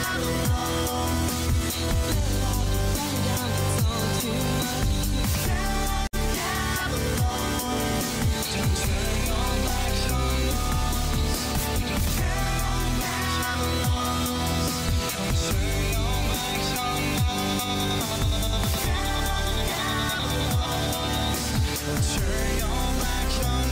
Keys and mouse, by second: 0.5 click, 3.7 click, 5.1 click, 10.0 click, 10.9 click, 14.9 click, 15.9-17.5 drag, 17.9 click, 19.6 click, 19.8-22.4 drag, 23.2-23.6 middle drag.